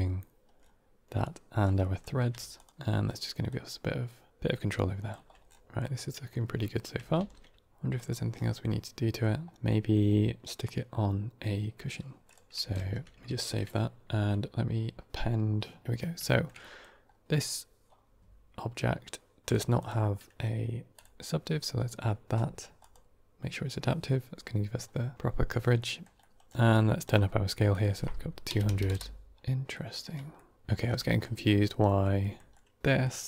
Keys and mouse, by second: 1.7 middle click, 2.5 ctrl+shift+click, 3.3-5.0 drag, 5.7-6.2 middle drag, 7.1 ctrl+s, 7.6 g, 8.5-9.1 middle drag, 9.6 middle click, 12.1 click, 12.7 ctrl+s, 14.1 F4, 15.8 middle click, 16.2 shift+middle drag, 16.5 middle drag, 19.3 click, 19.7-20.9 drag, 22.7 click, 25.7 middle click, 26.1 middle click, 26.7 middle click, 27.6-29.2 drag, 28.7 KP_0, 29.6 middle click, 30.2 middle click, 30.9 middle click, 31.3 middle click, 31.7 middle click, 32.1 middle click, 32.7 middle drag.